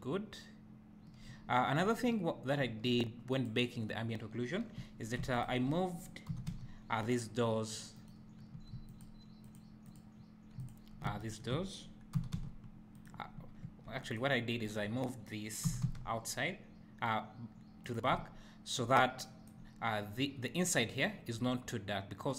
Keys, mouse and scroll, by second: 2.8 `, 3.5 click, 5.4 shift+click, 6.4 g, 8.1 right click, 9.0 click, 11.3 shift+click, 12.2 g, 13.1 right click, 13.6 `, 14.7 click, 15.8 g, 17.9 click, 18.2 `.